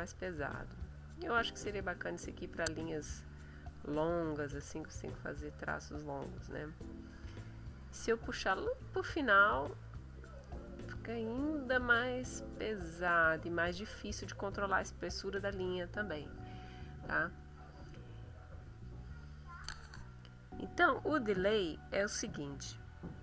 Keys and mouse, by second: 0.5-3.0 drag, 3.8-6.4 drag, 6.4 middle click, 7.8-8.7 drag, 9.6-14.2 drag, 18.7 click.